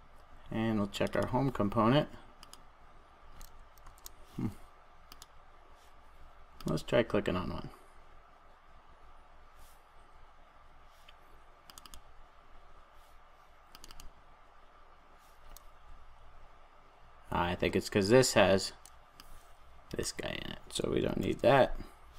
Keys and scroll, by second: 3.8 super+s, 21.2 super+s.